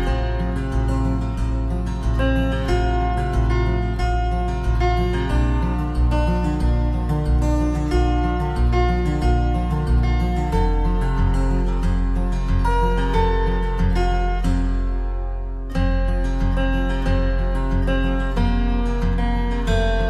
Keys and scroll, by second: 3.7 ctrl+[, 6.5 ctrl+-.